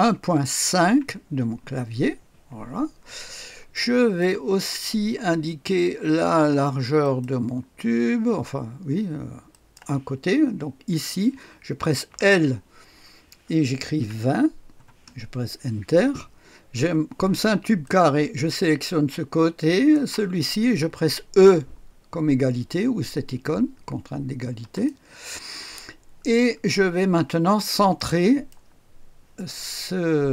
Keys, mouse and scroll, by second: 0.1-2.2 typing, 3.2-3.7 scroll up 1, 3.5-4.7 typing, 3.7 click, 7.0 click, 9.5 click, 12.0 i, 14.0 KP_2, 14.7 KP_0, 15.0 Return, 17.8 click, 19.7 click, 24.6 e, 24.7 click, 25.9 scroll up 1, 26.2-26.8 scroll down 1, 27.9 right click.